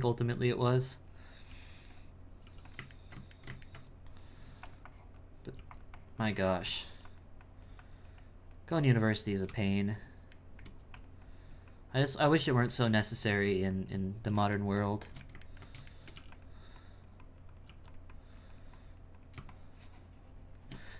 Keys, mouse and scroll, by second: 1.5 f, 2.4 f, 3.1-4.5 shift+middle drag, 4.5 f, 4.8 click, 5.5 f, 5.9 click, 6.5 shift+middle click, 7.4-10.4 drag, 10.4 shift+middle click, 11.2-12.5 drag, 12.9-14.6 drag, 14.6-16.2 shift+middle drag, 16.8 click, 18.1-20.9 drag.